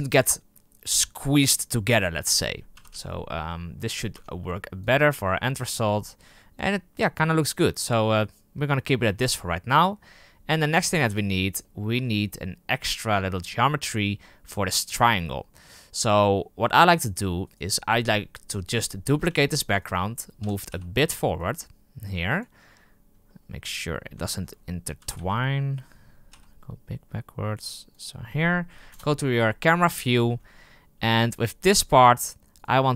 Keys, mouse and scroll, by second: 4.1 Tab, 4.8 click, 5.3-5.7 middle drag, 5.7 scroll up 4, 7.8 scroll down 3, 11.6-12.1 middle drag, 12.1 scroll up 4, 15.0-17.4 scroll down 5, 17.4 right click, 19.2 shift+d, 20.4 g, 23.0 scroll up 3, 23.2-23.8 middle drag, 23.8-24.9 scroll up 6, 24.1-24.4 shift+middle drag, 25.0 g, 28.8 KP_0, 29.9 right click, 30.9 h, 31.3 right click, 31.6 Tab, 32.5 right click.